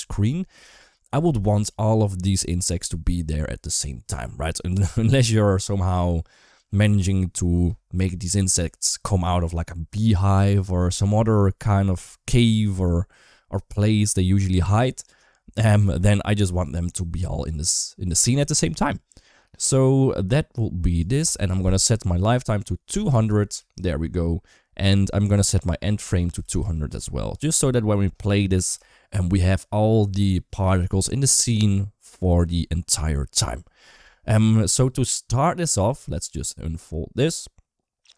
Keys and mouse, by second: 20.8-23.3 drag, 22.9 0, 25.1-26.7 drag, 26.4 0, 28.7 shift+middle click, 35.9 click.